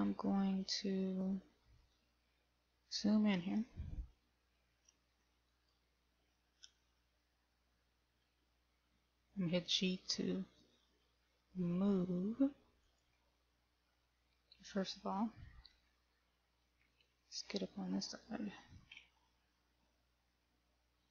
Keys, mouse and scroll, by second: 0.4 shift+middle click, 2.7 scroll up 2, 3.4-4.3 scroll up 1, 5.9 right click, 8.6 g, 13.8 middle click, 16.6 shift+middle click, 19.5-20.3 scroll down 1, 20.3-21.1 scroll down 1.